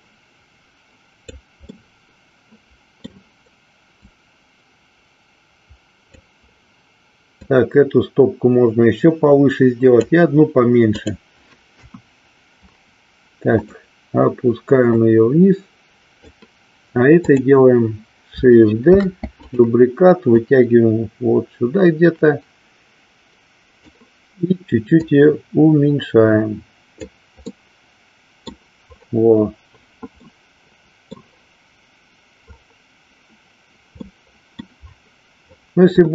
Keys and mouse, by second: 1.7-3.2 middle drag, 4.1-6.1 drag, 7.4-10.2 drag, 10.9 click, 11.8 KP_1, 13.7 click, 14.9-16.3 drag, 17.2 click, 19.6 click, 20.4-23.9 drag, 25.1-27.2 drag, 27.6-28.6 middle drag, 30.1-31.3 middle drag, 34.1 middle click.